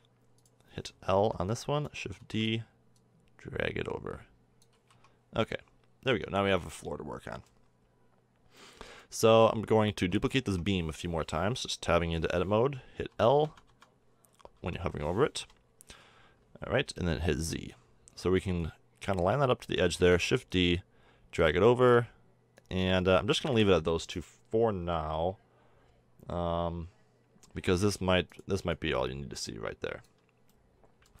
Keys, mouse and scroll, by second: 1.2 l, 2.2 shift+d, 4.8 a, 4.9 Tab, 5.5 middle click, 5.8 middle drag, 6.4-6.9 middle drag, 8.7-9.4 middle drag, 9.6 Tab, 10.0 Tab, 10.5 Tab, 13.1-15.4 typing, 17.0 z, 20.0 shift+d, 21.7 click, 23.3 click, 30.2-31.2 middle drag.